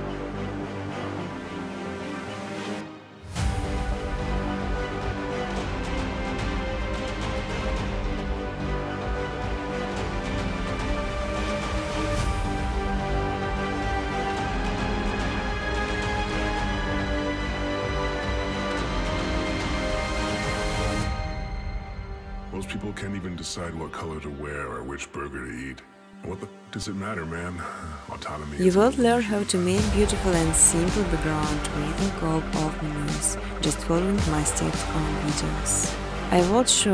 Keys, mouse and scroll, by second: 0.8 click, 1.5 scroll, 1.8 click, 2.3 click, 2.9 scroll, 3.7 click, 4.1 scroll, 6.9 click, 7.5-7.8 typing, 8.9 Tab, 10.7-12.8 typing, 14.8 Tab, 15.4 Tab, 16.0 Tab, 16.3 Tab, 16.9-18.1 typing, 19.5 Tab, 19.7 Tab, 20.0 Tab, 20.0-20.9 typing, 22.0 Return, 24.3 click, 24.6 typing, 25.1 click, 27.0 click, 31.5 click, 32.0 click, 32.4 0, 32.7 click, 35.6 click, 36.0-36.9 typing, 36.6 click.